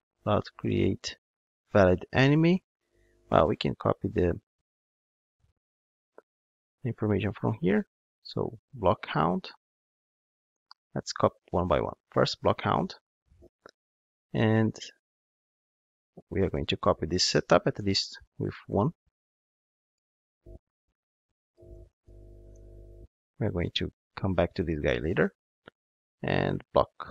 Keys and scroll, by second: 11.4 super+c, 12.0 ctrl+Tab, 13.3 super+v, 14.9 ctrl+Tab, 17.8 super+c, 18.2 ctrl+Tab, 20.3 super+v, 25.1 ctrl+Tab.